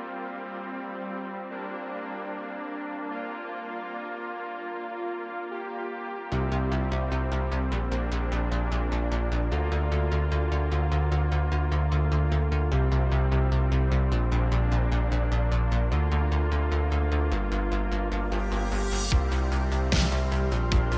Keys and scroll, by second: 1.1 r, 1.3 z, 2.7 r, 2.9 z, 4.6 g, 5.9 g, 8.5 g, 16.8 alt+g, 17.0 alt+r.